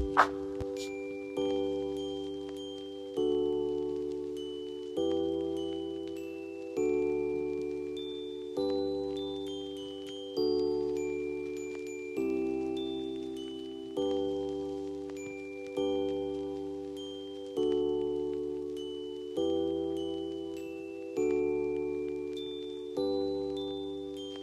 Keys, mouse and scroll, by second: 1.5-3.7 shift+drag, 4.7-7.5 drag, 11.1 F4, 11.9-14.1 drag, 14.1 Caps_Lock, 14.2 click, 14.6 scroll down 1, 15.5-19.6 drag, 19.6 F2, 20.2-24.4 drag.